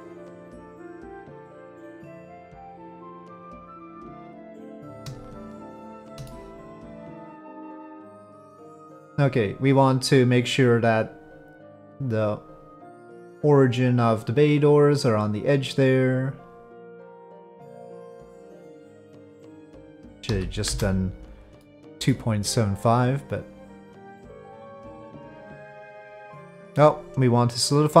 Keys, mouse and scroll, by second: 1.7-3.2 middle drag, 4.1 middle click, 5.7 shift+click, 6.2 middle click, 7.9-8.4 middle drag, 11.8-12.8 drag, 21.6 middle click, 22.8 click, 26.8-28.0 drag.